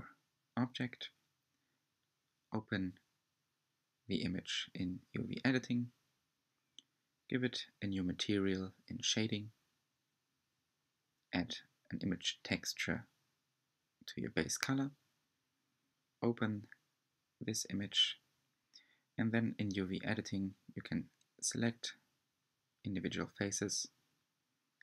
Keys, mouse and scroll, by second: 0.9 scroll up 4, 1.6 scroll down 3, 1.8 3, 2.0 Left, 2.4 a, 2.7 g, 3.8-7.6 typing, 5.2 scroll up 2, 5.4 shift+middle click, 9.1 click, 9.4 g, 12.1 click, 12.1 g, 14.3 click, 14.6 g, 16.1 click, 16.2 g, 17.0 shift+middle click, 17.2-17.8 scroll up 1, 17.8 g, 20.1 click, 20.3 g, 22.2 shift+middle click, 22.3 click, 22.4-24.8 typing, 22.6 Tab, 22.7 middle click, 22.7 scroll down 1, 22.8 middle click, 23.1 click, 23.1 click, 23.2 Tab, 23.3 scroll down 1.